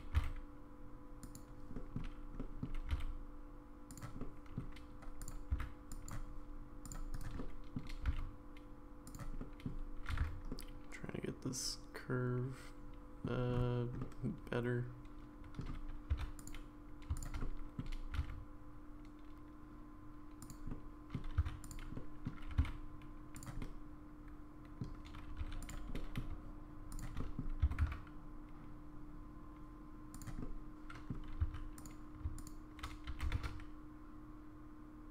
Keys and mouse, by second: 0.1 g, 1.7 middle click, 2.4 middle click, 2.9 g, 4.2 middle click, 5.2 click, 5.5 c, 7.4 middle click, 8.0 g, 9.4 middle click, 10.2 alt+z, 10.5-13.2 middle drag, 14.0-15.6 middle drag, 16.1 2, 16.4 click, 17.4 middle click, 18.1 g, 20.7 middle click, 21.6 click, 21.6 1, 21.9 middle click, 22.5 g, 23.6-24.8 middle drag, 25.4 2, 25.6 click, 25.9 middle click, 27.2 middle click, 27.6 s, 30.4 middle click, 31.7 click, 31.7 1, 32.3 shift+click, 33.1 g.